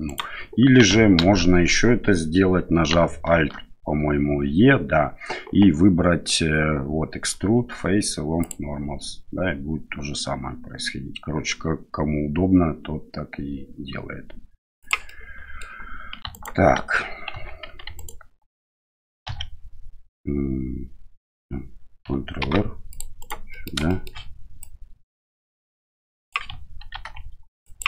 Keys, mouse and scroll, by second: 1.2 ctrl+z, 3.3 alt+e, 15.1 middle click, 16.3 alt+right click, 17.3 2, 17.9 alt+right click, 19.2 2, 22.4 ctrl+r, 23.9 shift+right click, 24.7-26.3 drag, 26.9 ctrl+r.